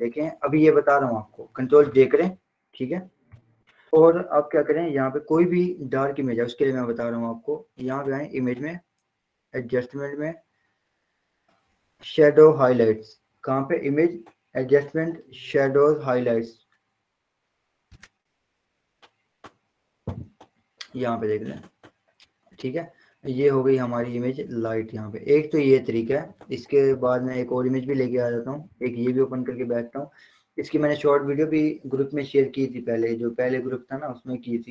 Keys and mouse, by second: 0.3 ctrl+j, 8.1 click, 17.8 click, 23.3-25.9 drag, 26.7 ctrl+o, 29.6 click.